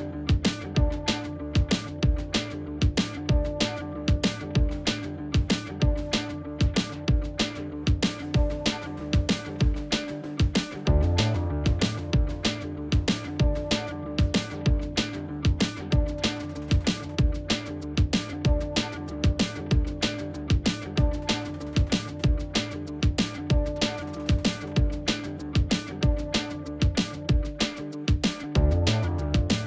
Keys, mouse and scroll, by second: 11.1-12.0 typing, 12.2 Return, 13.4 alt+scroll up 1, 13.8 space, 15.5 alt+scroll down 1, 15.8 space, 24.5 double click, 24.8 space, 25.1 double click, 25.2 space, 26.6 double click.